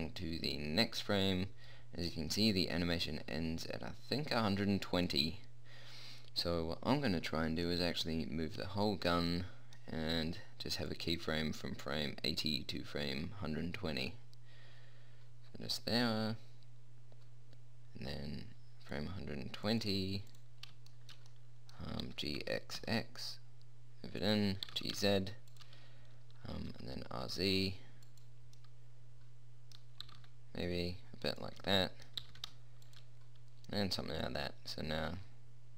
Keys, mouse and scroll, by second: 0.7 middle click, 5.3-7.1 drag, 11.2-13.3 drag, 19.9-21.4 drag, 22.3 g, 24.9 g, 26.9 r, 30.3 r, 32.5 g.